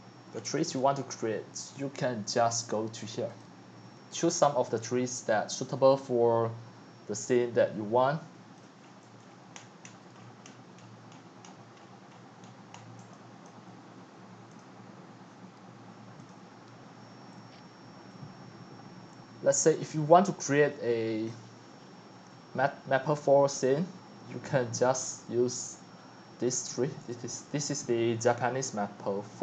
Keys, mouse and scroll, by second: 0.3 shift+click, 0.7 x, 1.2-3.4 drag, 6.0-8.8 drag, 8.8-9.6 scroll up 18, 9.6-10.8 shift+click, 10.1 shift+click, 10.4 shift+click, 10.8 shift+click, 10.9-12.9 shift+middle click, 11.1 shift+middle click, 12.4 shift+middle click, 12.7 shift+middle click, 13.1 x, 13.5-18.6 drag, 24.2-26.6 drag, 29.3 click.